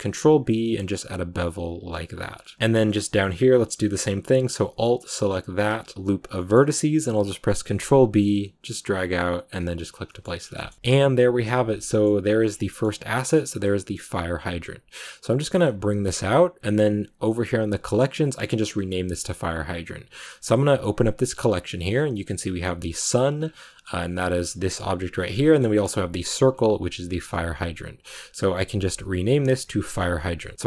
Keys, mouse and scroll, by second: 2.1 Tab, 2.2 scroll down 4, 2.5 middle click, 3.0 scroll up 1, 3.1-5.6 middle drag, 5.6 alt+right click, 6.3-7.6 middle drag, 7.6 ctrl+b, 9.7 Tab, 9.8 scroll up 1, 9.8 scroll down 3, 9.9 middle click, 10.1 scroll up 1, 10.2 a, 10.3 scroll down 2, 10.4-12.4 shift+middle drag, 12.4 scroll down 3, 12.6-18.2 middle drag, 18.2 scroll up 1, 18.3-23.0 middle drag, 23.0 click, 23.3 scroll down 1, 23.5 middle click, 23.9-25.0 scroll down 6, 25.0-26.0 scroll up 10, 25.3 middle click, 26.4 click, 26.9-27.9 middle drag, 27.9-29.3 drag, 30.2 click.